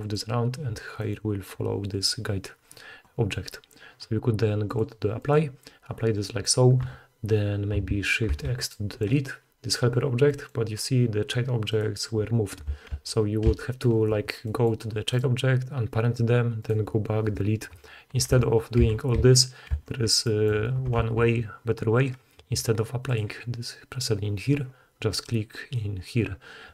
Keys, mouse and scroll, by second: 4.6-11.6 drag, 8.2 shift+x, 11.7-15.0 drag, 12.9 ctrl+z, 13.4 ctrl+z, 15.0 middle click, 15.1-16.3 drag, 16.5 click, 16.5 right click, 18.3 ctrl+z, 18.4-19.7 ctrl+drag, 18.8 ctrl+z, 19.7 ctrl+z, 21.0 ctrl+shift+z.